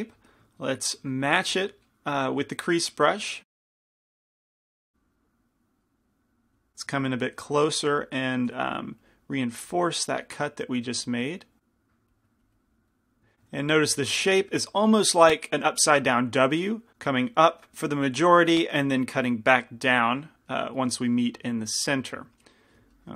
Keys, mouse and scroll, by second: 1.5 f, 6.8-8.6 middle drag, 8.6 f, 9.6-13.4 drag, 13.4 middle click.